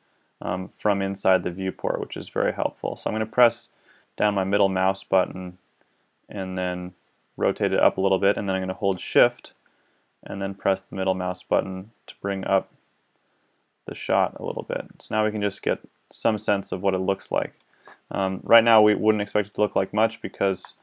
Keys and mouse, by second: 4.6 middle click, 20.6 click.